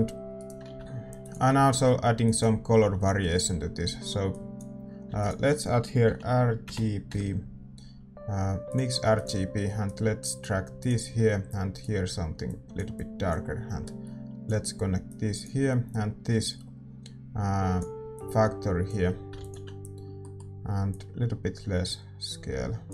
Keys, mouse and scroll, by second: 20.2-22.1 middle drag, 20.9-22.9 drag.